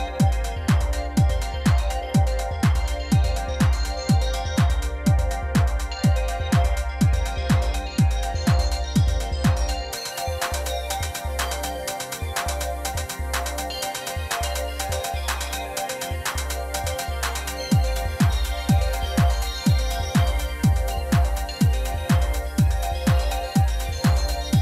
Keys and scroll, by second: 2.5 r, 4.5 x, 6.1 Tab, 6.3 a, 6.8 s, 6.9 x, 7.7 Tab, 12.4 r, 12.6 x, 13.5 r, 13.6 y, 15.9 r, 16.0 z, 18.2-20.5 typing, 22.5 r, 23.4 alt+a.